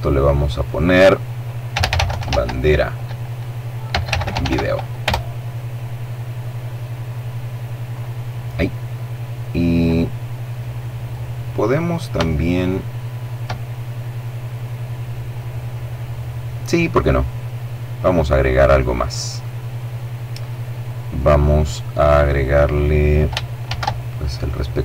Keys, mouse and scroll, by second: 0.5-4.1 typing, 6.9 click, 9.6-10.6 middle drag, 11.2 shift+middle click, 16.0-17.0 middle drag, 19.0 middle click, 19.8 middle click, 20.8-22.6 middle drag, 22.7 shift+a.